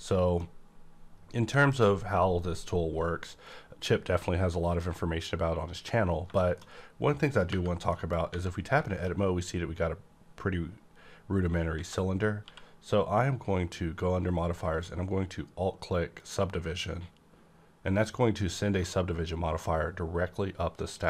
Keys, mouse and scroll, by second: 0.3 middle click, 0.4-6.1 middle drag, 0.4 click, 6.2 middle click, 6.2 click, 6.3-7.4 middle drag, 7.4 /, 7.8 middle click, 8.2 Tab, 8.8 shift+middle click, 8.8 shift+middle click, 11.7 Tab, 11.7 shift+middle click, 12.3 q, 14.5 Right, 16.2 alt+click, 16.2 alt+click.